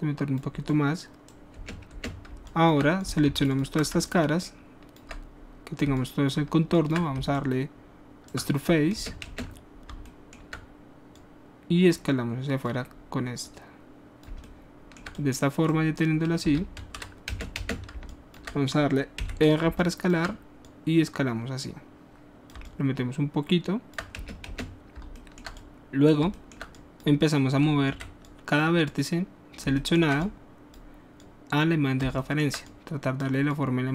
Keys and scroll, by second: 1.6 space, 8.9 alt+shift+space, 16.7 ctrl+z, 17.3 ctrl+space, 19.1 r, 24.1 alt+space, 28.0 w.